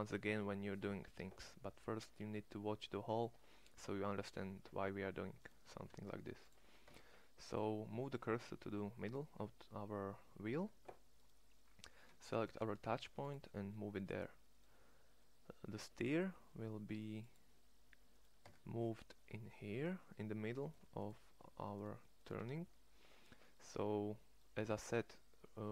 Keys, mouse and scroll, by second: 5.6 shift+s, 6.7 Tab, 10.5 Tab, 12.3 shift+s, 15.6 Tab, 18.4 Tab, 22.5 Tab.